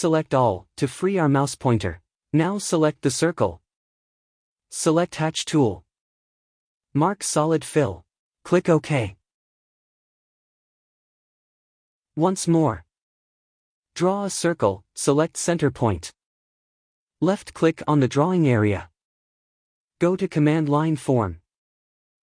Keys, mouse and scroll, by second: 0.1-22.2 middle drag, 1.2-1.7 drag.